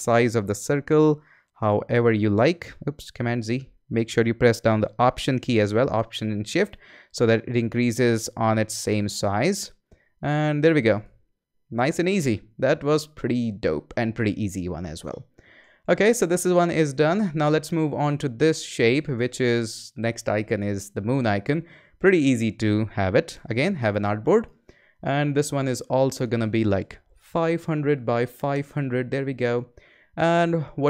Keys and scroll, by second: 3.1 shift+super+z, 3.7 super+z, 23.3 a, 26.9-28.5 typing.